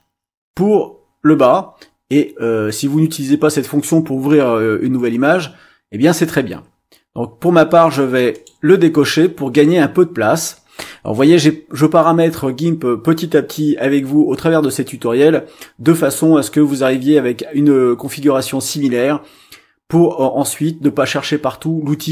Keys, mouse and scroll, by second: 7.8 click, 8.3 click.